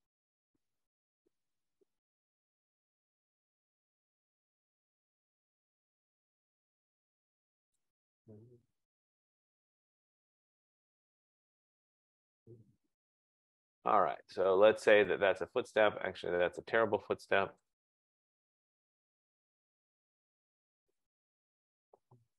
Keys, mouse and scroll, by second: 1.4 click, 3.1 click, 5.2 click, 7.8 click, 10.1 click, 12.3 click, 13.8 click, 15.2 click, 15.8 click, 17.8 click, 20.5 click, 22.1 click.